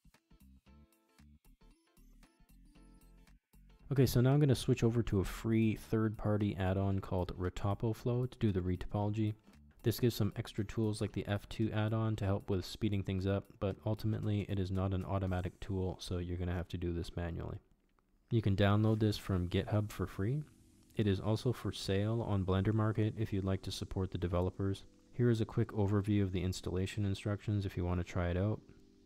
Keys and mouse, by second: 1.9 Delete, 3.0 KP_1, 5.1 shift+middle drag, 5.9 shift+middle click, 9.2 click, 19.5-28.1 drag.